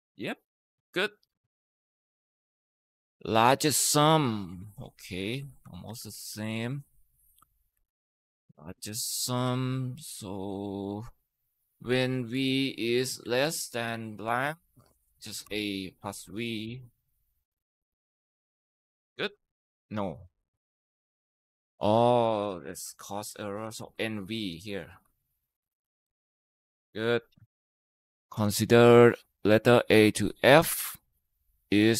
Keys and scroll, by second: 5.3 ctrl+c, 5.7 Escape, 7.5 ctrl+v, 12.1 BackSpace, 13.0 BackSpace, 15.3 v, 16.5 Tab, 18.9 ctrl+Return, 18.9 typing, 23.4-24.8 typing, 25.8 ctrl+Return.